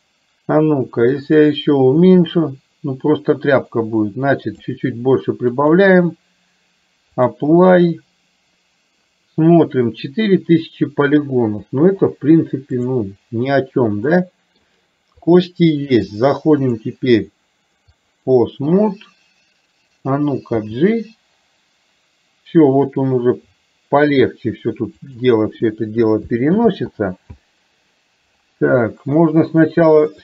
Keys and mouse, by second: 1.2-4.7 drag, 5.7-7.5 drag, 12.8 click, 14.2-14.8 middle drag, 16.8-18.2 drag, 26.9 ctrl+z.